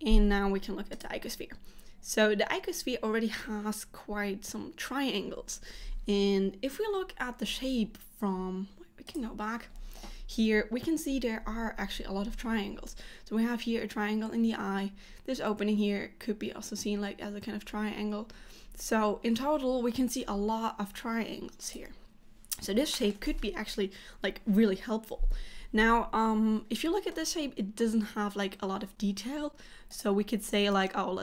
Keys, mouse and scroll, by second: 27.2 middle click, 29.9 click.